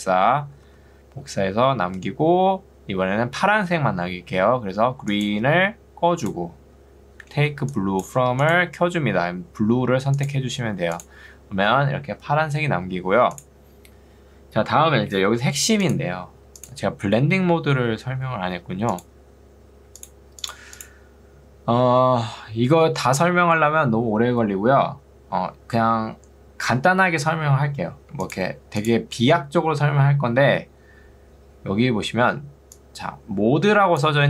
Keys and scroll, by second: 0.7 ctrl+d, 7.5 ctrl+2, 8.3 Escape, 32.3 ctrl+2.